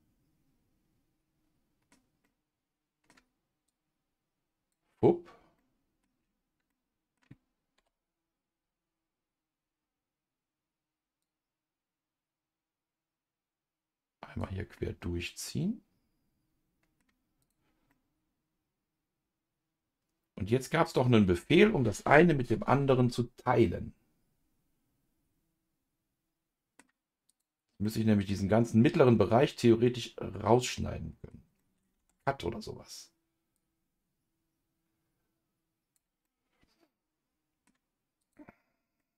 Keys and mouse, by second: 2.2 middle click, 3.7-4.8 drag, 5.6 middle click, 6.7 middle click, 7.8 KP_Divide, 11.2 click, 11.7-14.7 drag, 14.7-17.0 middle drag, 17.4 click, 17.9-21.4 middle drag, 22.2 ctrl+s, 23.6-26.8 middle drag, 27.3 click, 27.8 middle click, 29.4-31.3 middle drag, 31.6 middle click, 32.0 Tab, 33.5-36.2 drag, 36.2-37.7 middle drag, 38.2 click, 39.0 middle click.